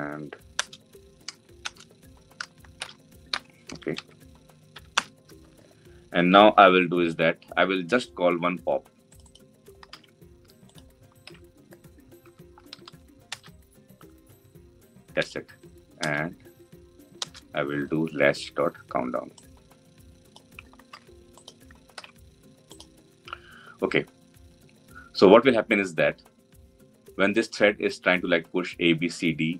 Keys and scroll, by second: 9.6 ctrl+c, 11.9 ctrl+v, 14.3 Return, 20.6 ctrl+c, 21.6 ctrl+v.